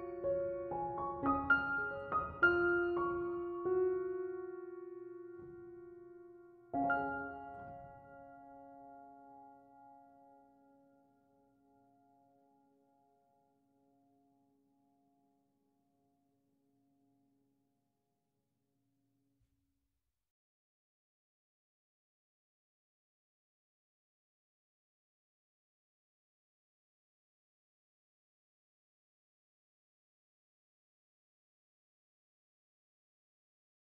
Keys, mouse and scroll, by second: 14.2-17.2 middle drag, 17.3-20.3 drag, 20.5-24.2 drag, 24.2-27.2 middle drag, 27.2-29.1 scroll down 2, 29.1 scroll down 1, 29.3 click, 30.4 click, 32.0-33.3 drag.